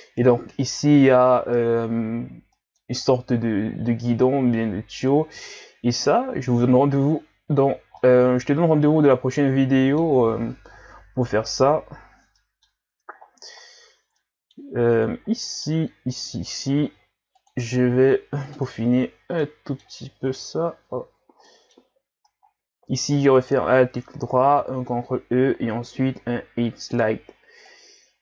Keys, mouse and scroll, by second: 1.2-2.2 scroll down 1, 2.2 scroll down 2, 2.5 middle click, 3.0-3.9 scroll up 2, 3.9-5.5 scroll up 1, 5.5-6.5 scroll down 2, 6.5-7.0 scroll down 1, 7.0-7.9 scroll down 4, 7.9 scroll down 1, 8.0-11.1 middle drag, 12.4-12.9 middle drag, 12.9-13.8 scroll up 7, 13.8 Tab, 14.2 middle click, 15.0-15.4 scroll down 4, 15.4 middle click, 15.8-16.8 scroll up 1, 16.8 ctrl+r, 18.9 Tab, 19.1-19.4 scroll down 1, 19.4 middle click, 20.3 ctrl+z, 21.1 ctrl+z, 21.5 middle click, 21.8-23.4 scroll up 5, 23.4 alt+right click, 24.6 ctrl+e.